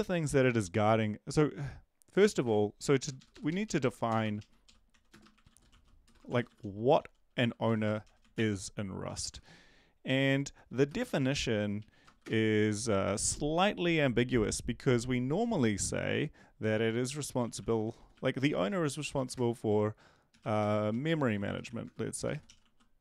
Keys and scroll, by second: 0.2 Up, 3.0 Up, 4.1 Return, 4.2 Return, 4.4-9.2 typing, 9.1 Up, 9.4 Right, 10.0 Left, 10.7-12.6 typing, 17.1-23.0 typing.